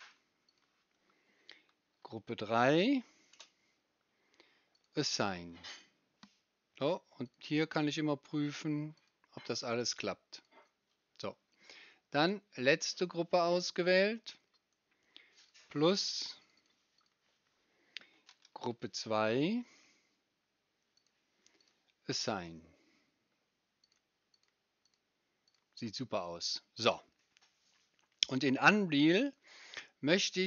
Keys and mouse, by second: 16.5 right click, 21.0 right click, 28.6 middle click, 28.8 click, 28.8 right click, 29.0 middle click, 29.1-30.4 drag, 29.1-30.4 right drag.